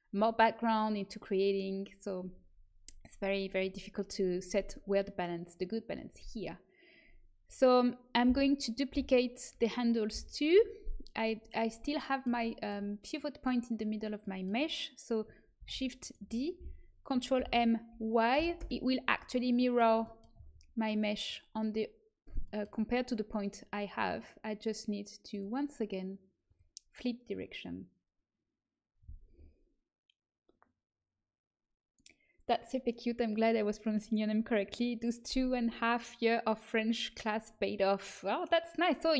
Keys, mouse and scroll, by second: 8.2 l, 8.9 l, 10.1 l, 15.5 shift+d, 17.3 ctrl+m, 25.2-28.2 drag.